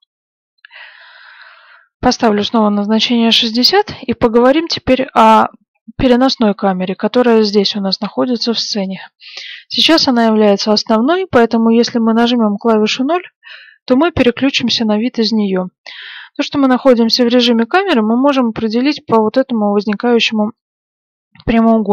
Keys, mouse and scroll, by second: 1.1 click, 3.4-4.0 scroll down 1, 4.0-8.5 middle drag, 13.5 KP_0.